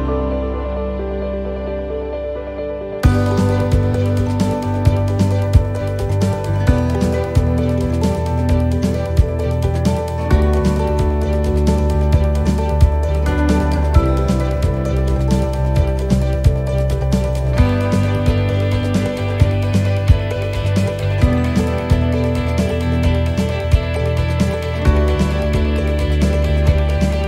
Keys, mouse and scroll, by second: 1.1 shift+middle click, 1.6 scroll up 4, 3.0 scroll down 3, 4.0 right click, 6.3 shift+d, 8.0 click, 10.8 scroll up 4, 11.3 shift+middle click, 13.2 right click, 13.7 shift+right click, 14.5 click, 16.1 right click, 17.5 l, 18.4 l, 19.1 l, 20.6-22.4 typing, 23.6-24.4 l, 24.6-25.8 l, 26.6 l.